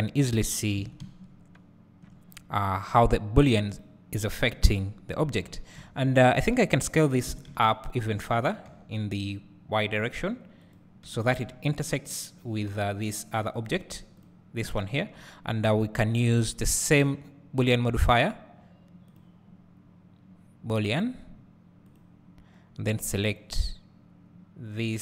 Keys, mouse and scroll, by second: 0.8 alt+a, 1.7 `, 2.7 scroll down 1, 3.8 click, 4.6 KP_Decimal, 5.4 scroll down 1, 6.6-7.4 scroll up 1, 7.4 s, 10.8-14.3 drag, 11.2 g, 22.0-23.5 drag.